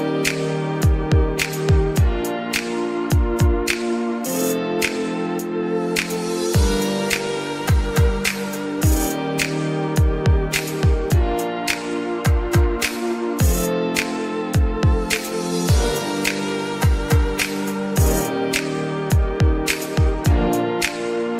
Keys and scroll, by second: 2.7 Escape, 3.2 Escape, 3.8 ctrl+x, 15.9 0, 16.1 1, 18.4 Escape, 20.3 0, 20.7 Return.